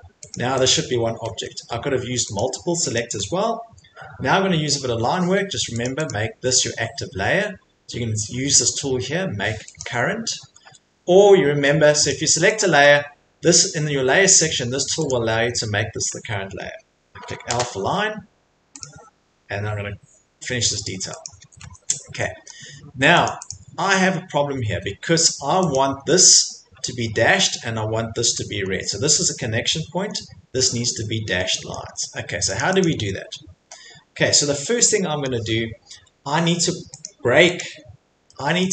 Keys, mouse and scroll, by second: 2.4 Escape, 2.4 click, 2.9 click, 3.2 Escape, 5.3 Escape, 5.8 click, 6.0 click, 9.7 click, 10.5 Escape, 10.7 Escape, 12.1 click, 12.6 click, 15.1 click, 16.1 Escape, 17.2 i, 18.8 click, 21.2 click, 21.4 Escape, 21.6 Escape, 21.7-22.1 scroll, 22.5-22.9 scroll, 23.2 click, 23.2 middle click, 23.5 click, 23.9 middle click, 24.1 middle click, 24.5 Escape, 24.7 Escape, 25.7 click, 26.8 Escape, 27.3 Escape, 28.2 middle click, 28.4 Escape, 28.4 middle click, 28.5 middle click, 28.6 middle click, 30.1 middle click, 31.7 middle click, 31.8 Escape, 32.5 click, 32.8 click, 34.1 Escape, 35.0 middle click, 35.3-36.4 scroll, 36.7 middle click, 37.0 click, 37.6 click, 37.9 middle click, 38.1 middle click, 38.6 middle click.